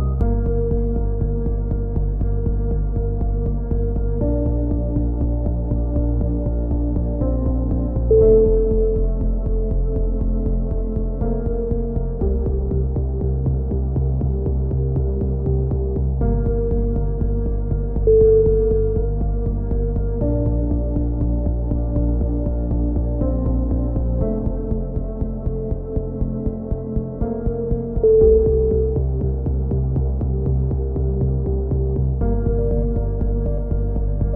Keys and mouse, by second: 0.2 click, 1.7 right click, 2.5 click, 2.5 right click, 3.1 click, 4.5 a, 4.7 click, 4.9 z, 5.4 Tab, 6.2 Tab, 8.7 z, 8.9-9.9 middle drag, 10.4-11.9 middle drag, 11.9-12.9 right drag, 12.9-14.1 middle drag, 14.1 click, 14.8 middle click, 15.8-17.2 drag, 17.8 click, 19.0 right click, 19.6 middle click, 20.0 click, 20.2 a, 20.4-22.0 middle drag, 20.7 z, 22.3 Tab, 22.9 z, 25.1 click, 28.2-29.2 drag, 31.0 Tab, 31.6 Tab, 32.1 click, 32.7 r.